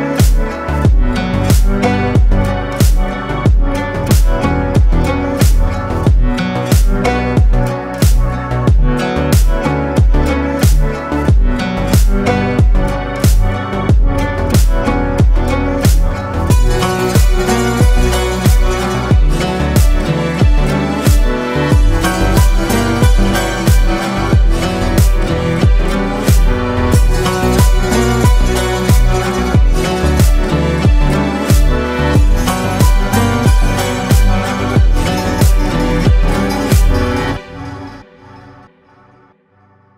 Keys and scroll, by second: 8.4 ctrl+space, 9.7 ctrl+space, 10.4 ctrl+space, 16.0 space, 23.8 ctrl+space, 24.9 ctrl+space, 29.4 ctrl+space, 29.9 ctrl+space, 37.8 ctrl+space, 39.5 ctrl+space.